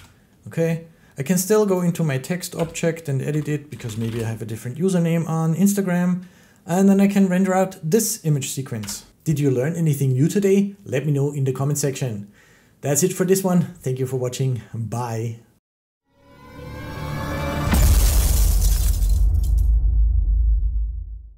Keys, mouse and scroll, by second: 1.6 click, 2.4 Tab, 3.1 End, 3.5-4.0 typing, 8.6 Tab.